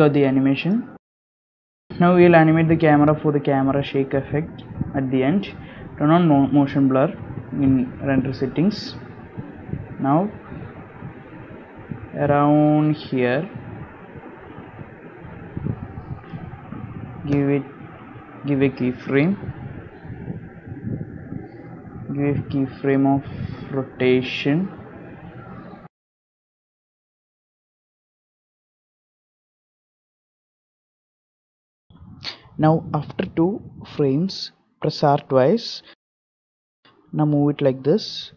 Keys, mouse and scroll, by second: 1.0 click, 2.2 space, 2.9 z, 3.0 z, 4.3 click, 6.6 click, 9.9 click, 15.4 scroll down 1, 16.8 Left, 16.9 i, 21.7 ctrl+z, 22.5 i, 26.9 KP_Decimal, 27.3 scroll down 3, 28.2 scroll down 2, 28.2 a, 28.4 a, 29.2 a, 29.4 a, 30.1 click, 30.6 shift+click, 31.6 KP_Decimal, 32.3 scroll down 2, 33.1 scroll down 4, 34.5 Right, 34.8 Right, 36.4 r, 37.7 r.